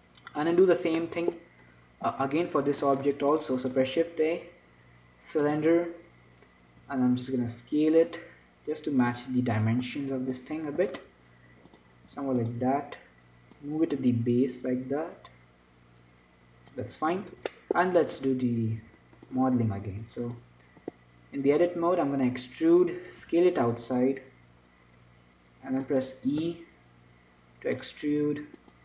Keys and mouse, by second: 0.8-1.8 drag, 1.8 middle click, 2.4-5.6 drag, 2.4 z, 4.1 shift+a, 7.1 s, 10.1-12.0 drag, 11.0 s, 12.4 s, 13.8-17.1 drag, 17.2-19.1 drag, 17.5 Tab, 18.5 a, 19.1 b, 19.8-21.7 drag, 22.2 e, 23.5 s, 26.7 e.